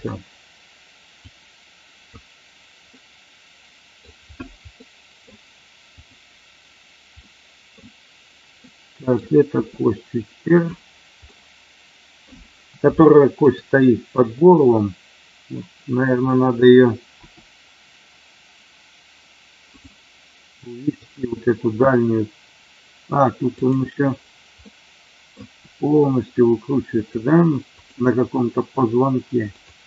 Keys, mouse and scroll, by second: 0.0-0.5 scroll down 1, 1.1 click, 2.9-3.9 middle drag, 4.8 middle click, 5.9 click, 7.1 middle click, 8.6 middle click, 10.5 click, 11.3 middle click, 12.9 shift+middle click, 17.3 r, 19.6 click, 21.0 click, 23.5 click, 24.5 middle click, 27.0 click, 27.7 click.